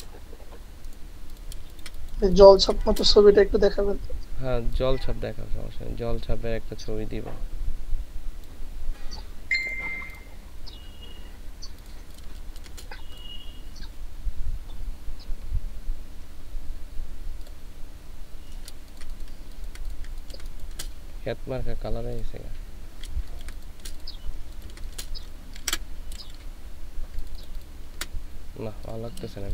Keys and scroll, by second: 12.3 ctrl+space, 18.9 ctrl+space, 23.3 ctrl+space, 24.5 ctrl+space, 25.6 space, 29.4 ctrl+space.